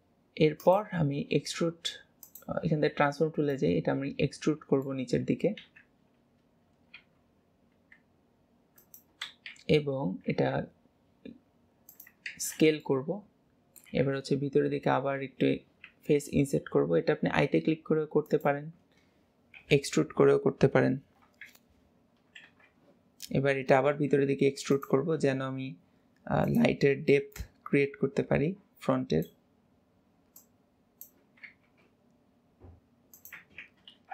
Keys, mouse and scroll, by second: 0.7-3.1 drag, 3.1-3.6 scroll up 3, 3.6 middle click, 5.7 KP_1, 7.0 e, 13.1-16.0 middle drag, 16.0 i, 19.6 KP_7, 21.3 KP_1, 22.6 alt+z, 23.1-23.8 scroll up 1, 23.8 e, 27.4 click, 30.4 click, 31.5 s, 34.0 alt+z.